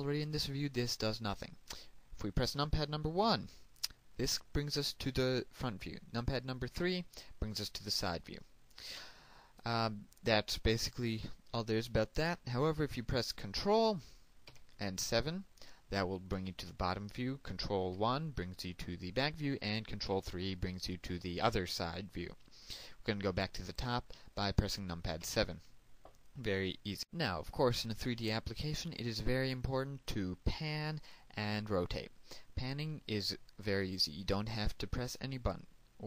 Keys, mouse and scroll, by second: 3.4 KP_1, 7.0 KP_3, 14.7 ctrl+KP_7, 18.1 KP_1, 20.3 KP_3, 25.4 KP_7, 26.9 click.